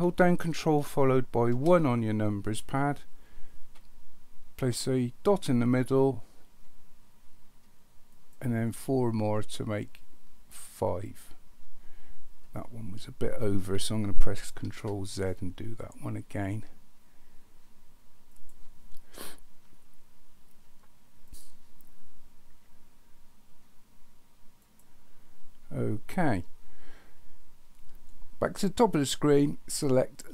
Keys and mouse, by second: 1.5 ctrl+KP_1, 5.3 click, 8.1 click, 10.9 click, 14.7 ctrl+z, 18.3 click, 21.3 click, 24.6 click.